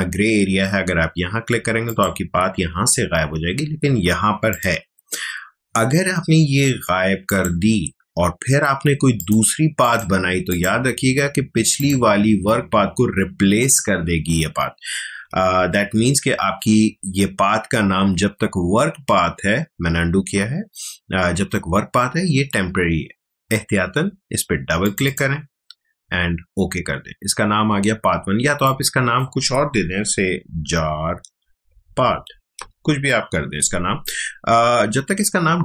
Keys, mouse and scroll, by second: 1.8 click, 4.5 click, 7.3 click, 15.1 click, 15.3 z, 16.3 ctrl+alt+z, 24.8 click, 28.6-30.5 drag, 30.2-32.8 typing.